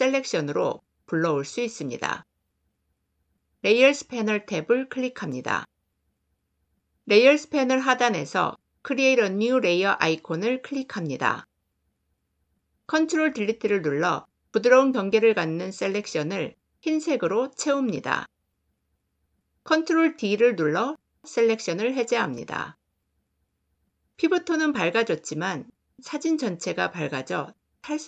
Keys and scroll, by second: 12.8 ctrl+BackSpace, 19.6 ctrl+d.